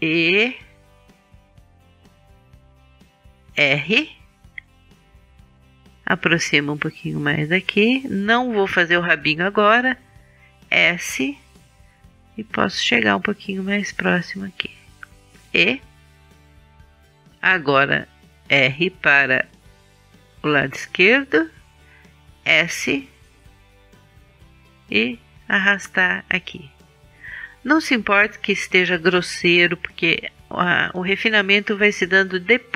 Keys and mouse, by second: 1.4 e, 3.4-5.3 drag, 3.8 r, 5.3-6.3 middle drag, 6.3-7.3 drag, 7.3 right click, 8.2-12.0 middle drag, 10.5 s, 12.0-13.7 drag, 14.8-16.0 middle drag, 16.0 e, 17.3 click, 19.2-22.0 middle drag, 19.3 r, 22.8 s, 24.0 middle click, 26.7-32.7 middle drag.